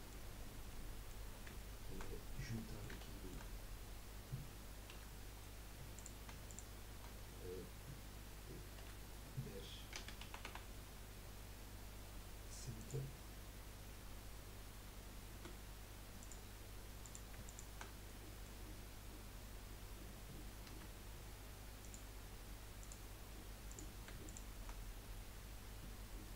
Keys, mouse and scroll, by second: 0.4-0.8 scroll down 4, 0.8 middle click, 1.4 scroll down 1, 1.6 shift+middle click, 2.3 scroll up 4, 2.5 middle click, 2.9 scroll up 1, 3.1 shift+middle click, 3.5-4.2 scroll up 2, 4.9 1, 5.9 click, 6.5 shift+click, 8.8 F3, 15.3 z, 17.0 click, 17.4 shift+click, 18.1-20.7 middle drag, 22.1 F3, 22.8 click, 23.7 click, 24.2 shift+click.